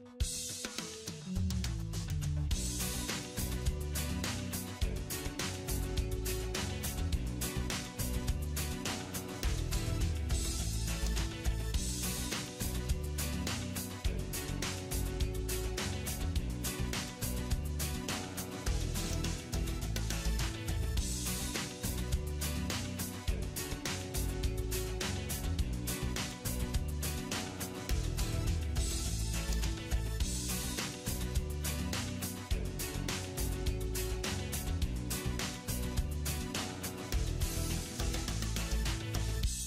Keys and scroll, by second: 0.1 alt+w, 8.0 alt+w, 23.0 alt+w.